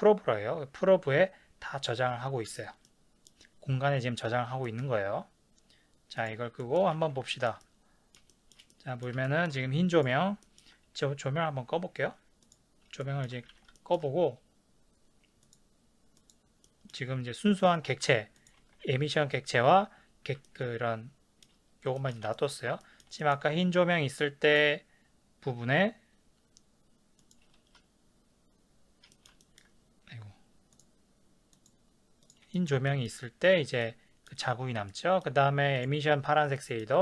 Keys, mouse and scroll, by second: 3.2-6.2 middle drag, 6.2 click, 6.6-9.9 middle drag, 7.0 ctrl+s, 9.9 click, 10.4-12.4 ctrl+middle drag, 12.4 click, 13.0-15.5 ctrl+middle drag, 13.6 ctrl+s, 15.5 click, 16.6-17.5 middle drag, 17.5 click, 17.9 g, 18.5 click, 18.6 ctrl+z, 20.4-24.5 shift+middle drag, 22.3 ctrl+s, 24.5 click, 27.2 click, 29.1-30.8 ctrl+shift+middle drag, 29.6-30.8 ctrl+scroll down 2, 30.8 click, 31.5 click, 32.2 click, 32.7-35.8 ctrl+shift+middle drag, 35.8 click, 36.6-37.0 ctrl+middle drag.